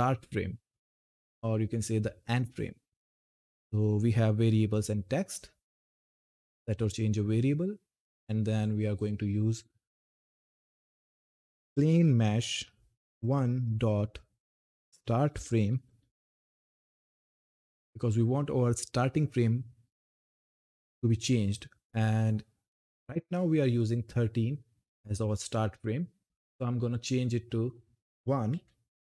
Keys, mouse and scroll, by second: 6.4 click, 10.3-12.2 typing, 14.6-16.4 typing, 26.1 click.